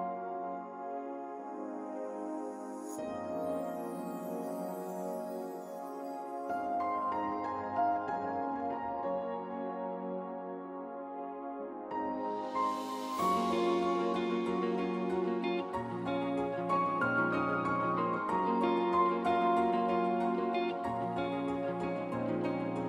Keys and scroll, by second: 5.2 ctrl+z, 6.9 ctrl+z, 7.2 ctrl+z, 8.4 ctrl+z, 8.6 ctrl+z, 8.9 ctrl+z, 9.3 ctrl+z, 10.6 ctrl+z, 20.8 ctrl+z.